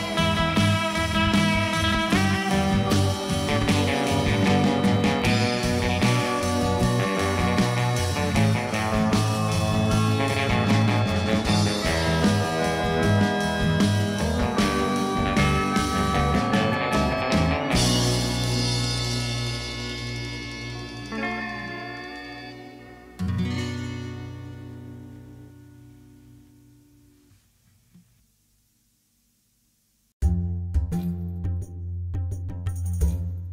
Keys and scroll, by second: 1.7 alt+a, 2.7 Tab, 3.3 s, 4.2 Tab, 4.4 g, 4.5 z, 5.9 g, 6.0 x, 7.9 Tab, 8.8 s, 9.0 y, 14.0-15.7 typing, 17.4 Tab, 17.5 g, 17.6 z, 20.1 Tab, 20.6 2, 21.2 ctrl+b, 22.4 alt+a, 22.7 Tab, 23.0 alt+a, 26.2 Tab, 26.9 3, 30.6 i, 31.3 i, 32.6 ctrl+z, 32.9 i.